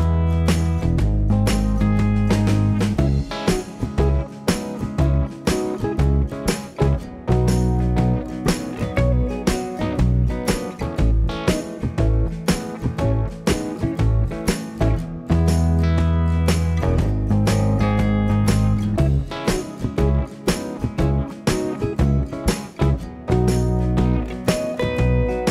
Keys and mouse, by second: 0.8-4.3 typing, 1.8-4.3 shift+middle drag, 5.7 shift+click, 6.4 click, 6.4 middle click, 6.7 right click, 6.8 f, 7.0 middle click, 7.2 f, 7.3 shift+click, 7.4 right click, 7.5 shift+click, 7.6-11.6 right drag, 7.8 shift+click, 7.8 shift+middle click, 8.5 f, 8.7 click, 9.1 f, 10.8 KP_7, 11.6 click, 11.8-25.5 shift+right drag, 11.9 f, 12.2 alt+z, 12.6 f, 12.8 f, 14.0 f, 15.5 click, 15.5 1, 16.6 g, 17.3 g, 17.7 g, 18.2 g, 19.1 alt+z, 19.5 alt+z, 19.8 3, 20.4 shift+click, 21.2 shift+click, 22.1 shift+click, 22.9-24.2 shift+drag, 25.3 KP_1.